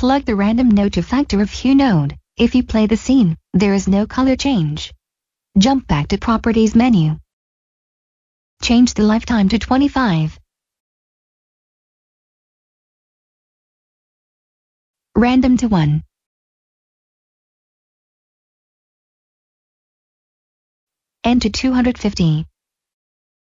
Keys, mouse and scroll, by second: 2.5 click, 6.1 click, 10.3 2, 11.5-12.4 typing, 13.0 Return, 14.5 click, 15.7 1, 16.0 Return, 19.5 click, 20.6-21.5 typing, 22.0 Return.